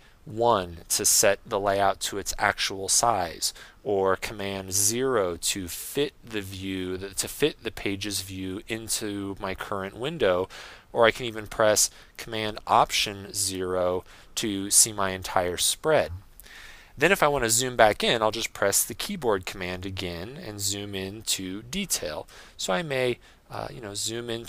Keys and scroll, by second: 0.3 super+1, 4.7 super+0, 13.6 alt+super+0.